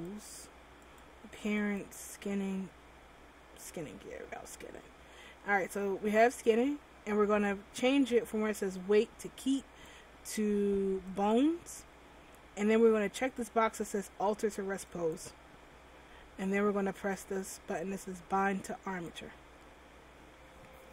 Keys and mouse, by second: 0.0 click, 9.8-20.9 drag.